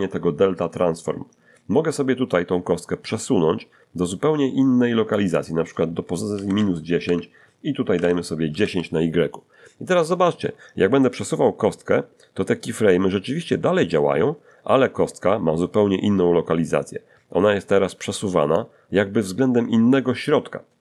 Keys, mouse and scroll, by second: 2.3-5.3 drag, 6.3 -, 6.4 1, 6.6 0, 7.0 Tab, 7.9 1, 8.0 0, 8.5 Return, 11.3-18.7 drag, 20.4 scroll down 2.